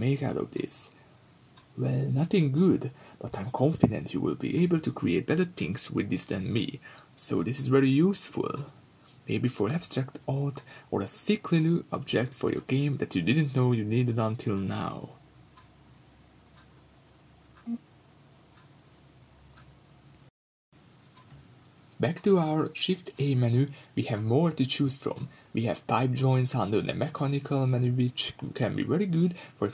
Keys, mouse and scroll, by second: 4.4-10.1 middle drag, 4.9 scroll up 1, 5.1 scroll down 2, 5.4-6.0 scroll up 2, 6.0 y, 7.1 Delete, 7.4 shift+a, 9.4-10.1 scroll down 2, 10.1-14.6 drag, 14.6-15.6 middle drag, 15.6 scroll up 1, 16.1 x, 16.4-16.7 scroll up 1, 16.9 middle click, 17.2 shift+a, 27.8-28.2 scroll down 2, 28.2-29.7 middle drag, 29.1-29.4 scroll up 2.